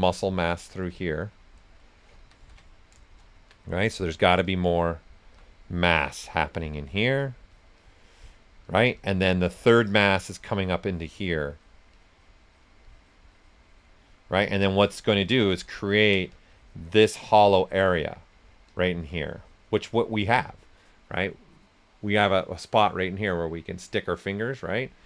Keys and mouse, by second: 0.5 right click, 2.2 ctrl+z, 2.8 right click, 3.3 alt+shift+right click, 4.7 click, 5.2 s, 5.3 click, 8.9-13.2 shift+drag, 14.4 shift+click, 15.1 s, 15.2 click, 15.9 ctrl+right click, 16.5-22.8 alt+drag.